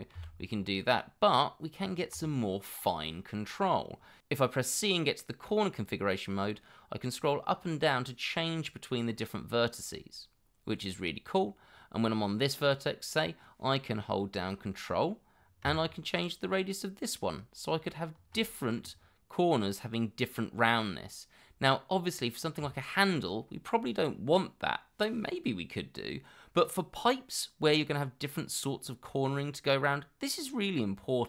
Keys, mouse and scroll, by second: 0.1 ctrl+x, 5.3 c, 6.8-7.1 scroll up 1, 7.1-7.5 scroll down 1, 7.5 scroll up 1, 8.0 scroll down 1, 8.3-8.6 scroll up 1, 8.8 scroll down 1, 9.1 scroll up 1, 9.4 scroll down 1, 9.7 scroll up 1, 10.0 scroll down 1, 10.4 scroll up 1, 10.8 scroll down 1, 11.1-11.6 scroll up 1.